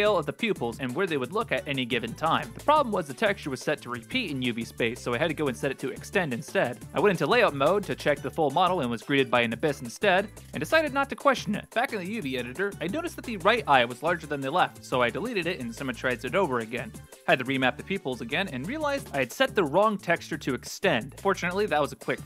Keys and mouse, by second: 2.1 click, 4.1-4.9 drag, 6.8 click, 8.6 click, 9.4 KP_Decimal, 10.9 click, 11.2 middle drag, 11.6 KP_1, 12.1 right click, 13.5 x, 15.4 l, 15.8 q, 17.1 ctrl+z, 17.1 l, 17.1 a, 17.1 s, 18.7 g, 21.1-22.2 drag.